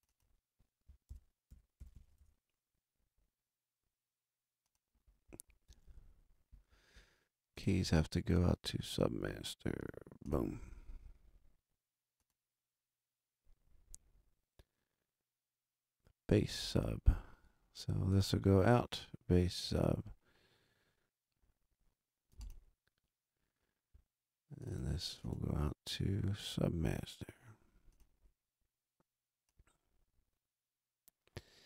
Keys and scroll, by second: 0.8-2.2 typing.